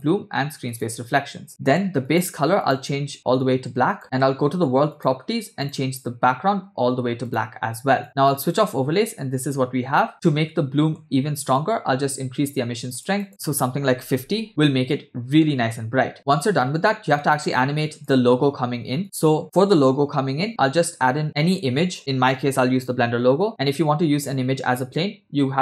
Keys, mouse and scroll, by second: 0.1 click, 0.7 click, 2.1 click, 2.6 click, 4.9 click, 5.7 click, 7.3 click, 8.3 click, 10.1 middle click, 11.6-14.5 drag, 15.4-16.1 scroll up 1, 16.1 scroll up 1, 16.1-18.2 drag, 19.0 click.